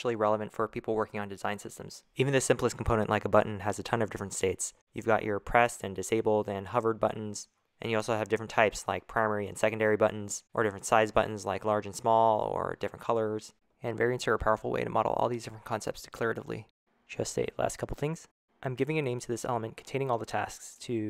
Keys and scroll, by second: 19.7-21.0 typing.